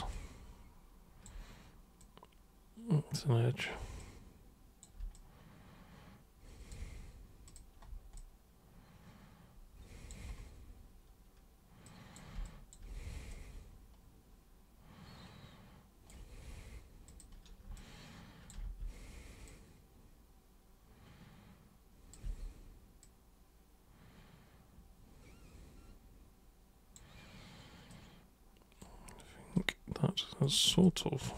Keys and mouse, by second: 0.1-1.2 alt+super+drag, 2.0-3.2 super+drag, 4.0 super+click, 5.2-6.7 alt+super+drag, 7.4 super+click, 8.2-10.1 alt+super+drag, 11.9 super+drag, 12.5 alt+super+click, 13.3-16.1 super+right drag, 17.1 super+click, 17.8 alt+super+click, 18.7 super+e, 19.5 super+click, 22.2 super+w, 23.0 super+click, 27.9 super+right click, 29.6 super+right click, 30.7 super+click.